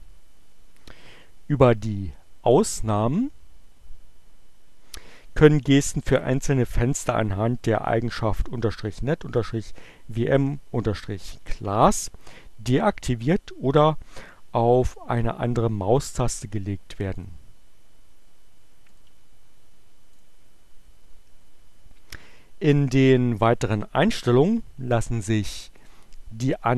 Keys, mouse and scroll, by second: 16.2 click, 18.8 click, 20.1 click, 25.6 click.